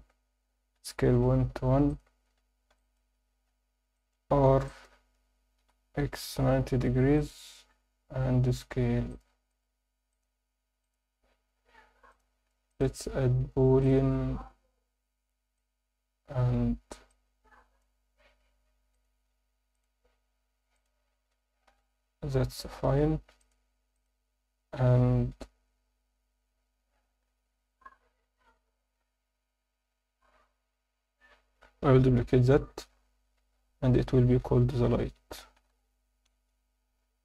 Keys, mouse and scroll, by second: 0.7 s, 1.1 ., 1.5 1, 1.9 click, 2.3-2.8 scroll up 2, 2.8 alt+shift+middle drag, 3.1 Tab, 3.4-3.8 scroll up 1, 3.9 alt+shift+middle click, 4.6 ctrl+alt+middle click, 5.6 r, 6.1 x, 6.6 9, 6.8 0, 7.1 click, 7.8 Tab, 8.3 s, 9.1 click, 9.5-10.8 right drag, 10.8 click, 12.1 click, 12.7-14.3 drag, 15.6-16.3 drag, 17.1-17.8 drag, 18.9 drag, 20.7 click, 21.7 h, 22.8 alt+h, 23.4 click, 23.9 click, 32.8 shift+d, 34.4 F2.